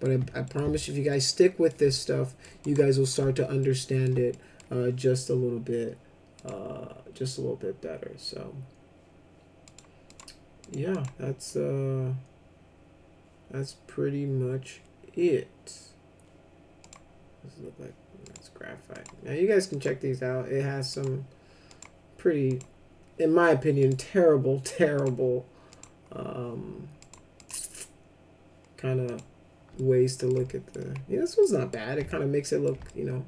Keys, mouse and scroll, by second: 0.4 middle click, 1.1 ctrl+alt+middle click, 1.9 middle click, 2.6 click, 3.6 alt+middle click, 4.3 middle click, 6.3 click, 9.6 click, 10.1 click, 10.6 click, 10.9 click, 16.8 click, 18.2 click, 18.9 click, 19.7 click, 20.9 click, 21.6 click, 22.4 click, 23.7 click, 24.9 click, 25.7 click, 27.0 click, 27.3 click, 29.0 click, 29.7 alt+middle click, 30.4 middle click, 31.4 middle click, 32.0 ctrl+alt+middle click, 32.8 middle click.